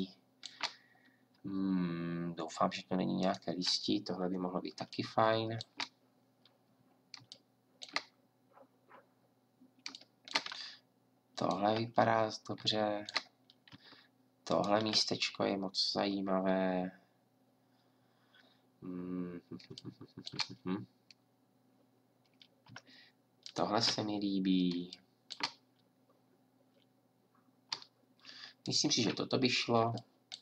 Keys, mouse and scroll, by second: 4.8-16.4 drag, 23.4-30.4 drag.